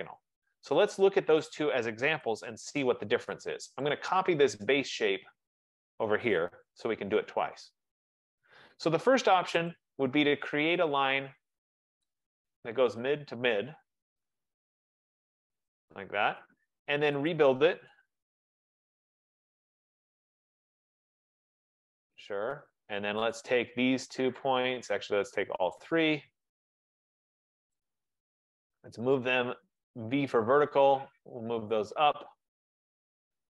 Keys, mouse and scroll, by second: 0.3 middle click, 0.4 middle click, 1.5 click, 2.3 typing, 3.0 Return, 4.0 click, 4.5 F15, 5.7 click, 6.8 Escape, 7.0 Escape, 7.6 middle click, 7.7 middle click, 7.8 middle click, 8.4 middle click, 8.5 middle click, 9.9 click, 12.3 click, 15.1 click, 16.0 Return, 17.4 click, 18.1-18.7 typing, 19.0 Return, 21.1 typing, 21.6 click, 23.5 click, 24.5 shift+click, 25.9 click, 27.9 click, 28.8-29.7 typing, 30.8 click, 32.8-33.5 typing, 33.1 click.